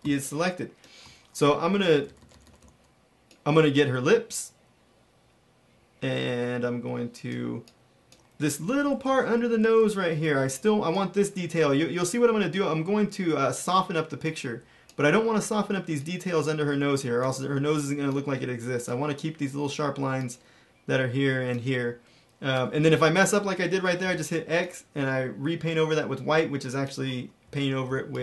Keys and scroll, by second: 0.0-2.5 typing, 8.5-10.3 typing, 23.9 x, 27.3 x, 27.8 space.